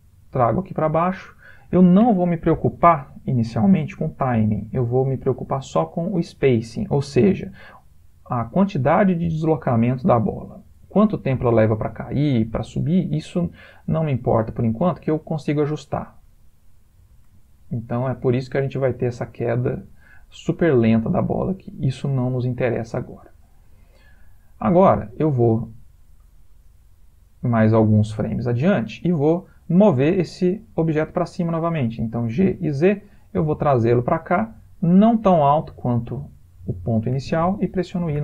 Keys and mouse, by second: 3.9 click, 10.7 click, 14.7 space, 16.3 Escape, 17.1 space, 18.2 space, 19.4 click, 32.5 g, 38.1 i.